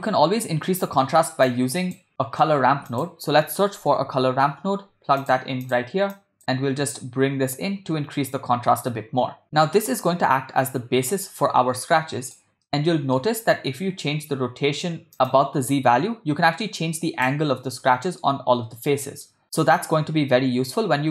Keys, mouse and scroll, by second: 0.8 middle click, 1.5 click, 2.2 middle click, 2.7 shift+a, 6.2-8.8 drag, 9.4 middle click, 11.8 click, 12.7 middle click, 15.3-17.3 drag, 17.8-18.2 middle drag, 18.8-19.2 middle drag, 19.4-21.1 middle drag.